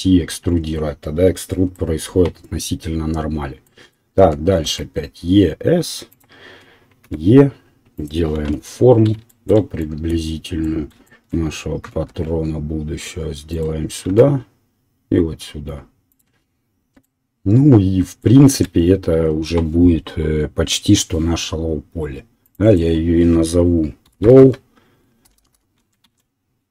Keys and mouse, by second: 2.2 e, 7.0 e, 7.7-22.6 middle drag, 8.3 KP_1, 11.8 e, 14.1 e, 16.8 Tab, 22.6-26.3 drag, 25.3 BackSpace, 25.5 BackSpace.